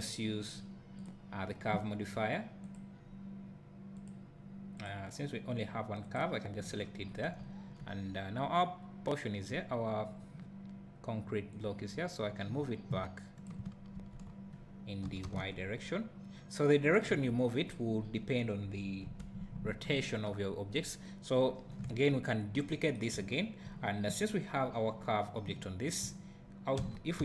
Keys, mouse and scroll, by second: 1.0-17.0 drag, 6.8-7.1 scroll down 2, 7.8-9.1 scroll down 2, 9.1-9.5 scroll down 1, 9.5-11.5 scroll up 2, 14.0 ctrl+z, 15.1 g, 17.1 KP_0, 17.7-19.1 scroll up 2, 19.1 KP_Decimal, 20.0 `, 21.4 scroll down 1, 22.3 scroll down 1, 26.8 alt+d.